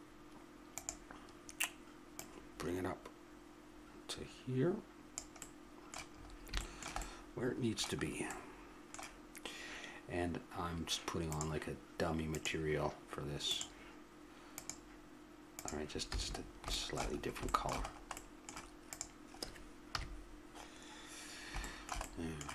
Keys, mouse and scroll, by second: 0.7-3.9 drag, 5.4-8.9 middle drag, 11.3-16.1 drag, 16.1 a, 16.4 middle click, 17.2 middle click, 17.5-18.9 middle drag, 18.9 click, 19.9 KP_3.